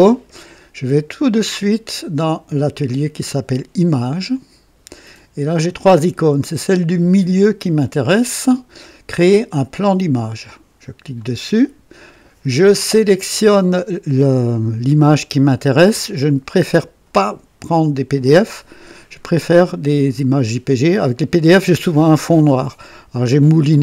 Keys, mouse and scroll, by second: 2.1 click, 4.3 click, 11.1 click.